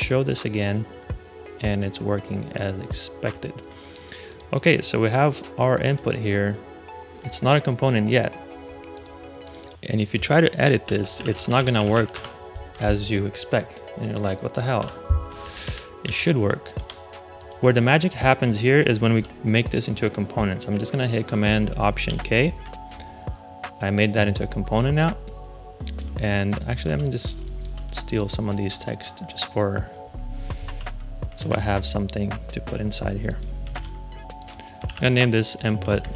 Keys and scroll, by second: 10.5-12.5 typing, 14.7 ⟲, 15.3 super+z, 16.7 Escape, 21.9 alt+super+k, 26.4 space, 30.6 super+x, 31.4 super+z, 33.6 super+v, 34.8 super+r, 35.5 Down, 35.6 Right, 35.9-36.1 typing.